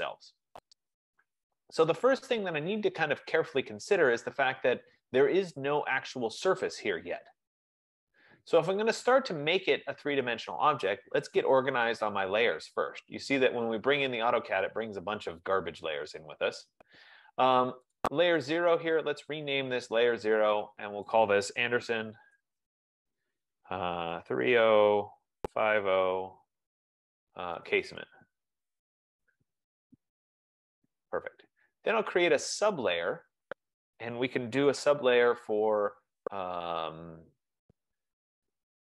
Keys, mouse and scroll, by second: 2.4 right click, 4.1 scroll, 6.1 click, 6.9 click, 9.5 scroll, 11.7 click, 14.9 click, 15.9 F15, 18.1 click, 19.9 click, 21.4 click, 21.7-24.9 typing, 26.8-30.0 typing, 30.7 Return, 33.5 click.